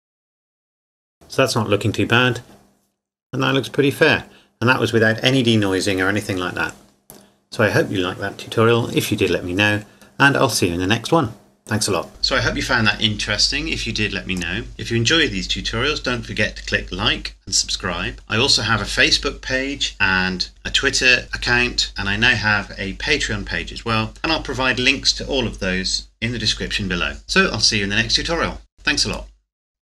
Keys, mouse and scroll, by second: 1.1-1.4 scroll down 1, 3.5 scroll up 1.